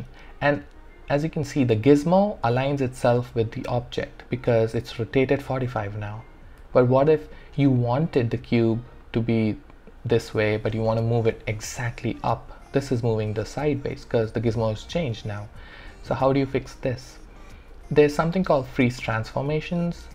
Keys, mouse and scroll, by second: 6.6 alt+click, 6.7-10.4 alt+drag, 12.7-14.1 drag, 14.1 ctrl+z, 17.5 alt+click, 18.4 alt+right click, 18.8 alt+click, 19.5-20.1 alt+middle drag.